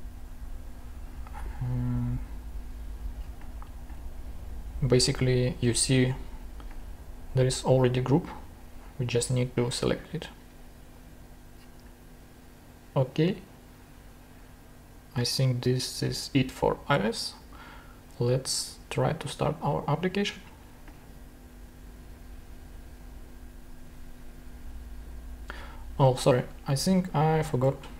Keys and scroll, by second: 27.7 super+Tab.